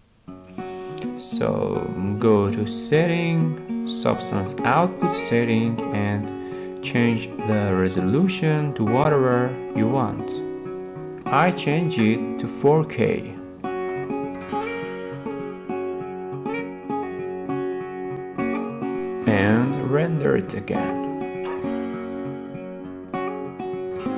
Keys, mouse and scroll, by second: 4.8-5.9 drag, 6.2-7.3 drag, 9.0-10.1 drag, 11.3-12.5 drag, 13.4-14.5 middle drag, 13.4-14.1 scroll up 3, 15.7-16.8 scroll, 16.8 scroll, 16.9 middle click, 17.7 middle click, 18.9 click, 19.6 click, 20.9-22.0 drag.